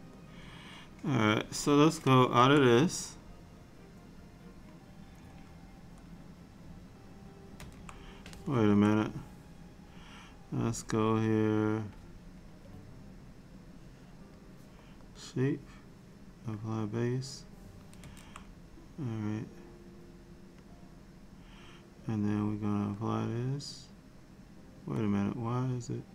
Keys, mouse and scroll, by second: 0.3 click, 2.4 Tab, 7.6 Tab, 8.6 Tab, 13.8 click, 15.2 click, 16.7 click, 18.1 Tab, 20.7 click, 23.1 click, 25.1 click.